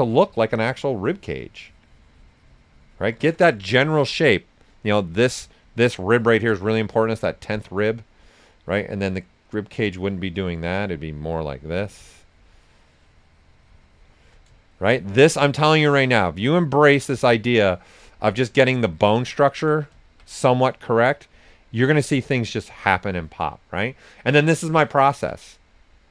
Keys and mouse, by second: 0.5-4.6 shift+drag, 4.9 right click, 7.6 click, 12.0-14.7 shift+drag, 14.7-17.0 shift+drag, 17.0 shift+click, 18.0-19.9 right drag, 20.2 ctrl+right click, 20.4-22.7 drag, 22.7 shift+click, 23.5 alt+right click, 24.8 ctrl+click.